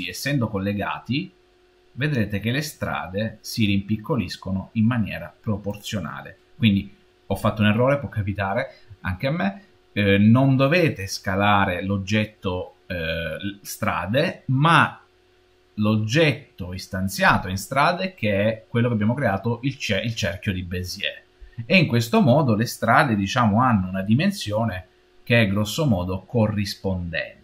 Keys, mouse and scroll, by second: 0.7 s, 22.8-25.8 middle drag, 26.0-27.4 scroll down 3.